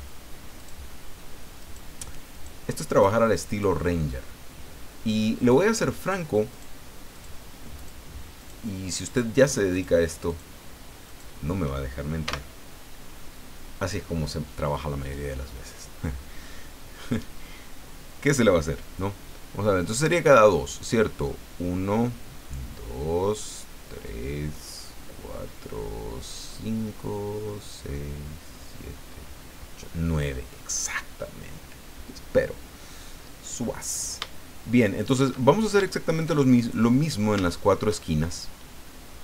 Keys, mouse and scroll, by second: 0.6 shift+right click, 1.6 shift+right click, 2.3 shift+right click, 2.9 shift+right click, 3.5 shift+right click, 5.4 shift+right click, 6.0 shift+right click, 6.5 shift+right click, 7.1 shift+right click, 7.8 shift+right click, 8.4 shift+right click, 9.1 shift+right click, 9.7 shift+right click, 10.3 shift+right click, 11.1 shift+right click, 12.2 f, 34.6 shift+middle click, 35.5-35.8 shift+scroll down 2, 35.9-36.9 shift+middle drag, 37.1-37.4 shift+scroll up 4, 37.4 shift+middle click, 38.7-39.2 scroll down 4.